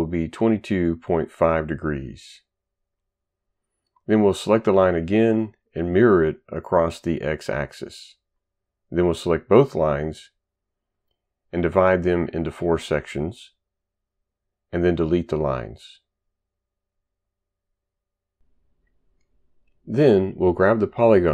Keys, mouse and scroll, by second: 0.2-1.7 typing, 2.1 Return, 4.3 click, 5.9 click, 7.1 click, 9.2 shift+click, 9.6 right click, 11.6-12.7 typing, 16.2 Delete, 16.8 ctrl+right click, 17.1 right click.